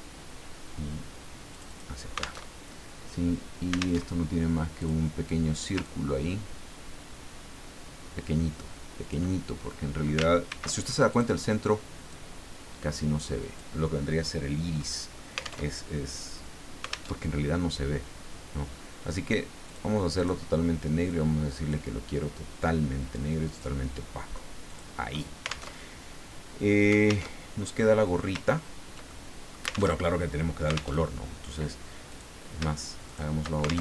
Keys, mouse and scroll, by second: 1.5 click, 2.5 alt+Tab, 4.0 alt+Tab, 4.8 click, 5.8-9.3 ctrl+drag, 10.4 ctrl+shift+c, 11.1 click, 12.1-13.8 drag, 14.2 scroll down 2, 14.7 scroll up 2, 15.1-15.6 scroll down 3, 15.6 alt+Tab, 17.1 alt+Tab, 19.7 click, 20.2 click, 21.1 click, 23.1 click, 24.7 click, 25.7 alt+Tab, 27.3 alt+Tab, 27.8 click, 28.5-28.9 ctrl+scroll down 2, 29.0 ctrl+middle click, 30.0 alt+Tab, 30.9 alt+Tab, 32.1 click, 33.1 shift+click.